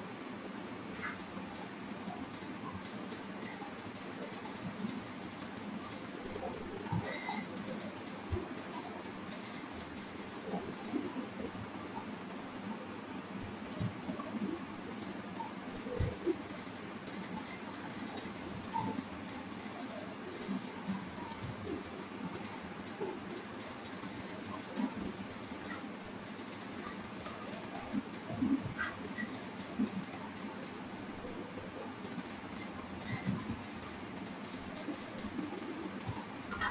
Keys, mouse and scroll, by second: 0.6 click, 2.4 click, 3.9 click, 4.9-6.3 scroll down 13, 6.8 shift+middle click, 6.8 scroll up 3, 7.7 middle click, 8.5-8.9 scroll down 1, 9.0 click, 9.5 click, 11.1 click, 11.9-12.3 scroll down 6, 12.4 shift+middle click, 12.9-14.2 scroll up 6, 13.1 shift+middle click, 14.2 click, 15.7 click, 17.1 click, 20.5 click, 21.3 shift+click, 22.3 click, 26.3-27.0 scroll down 11, 27.2 scroll up 1, 27.4 shift+middle click, 27.8-28.4 scroll up 3, 28.8 scroll up 1, 29.8 click, 31.0 click, 35.3 click.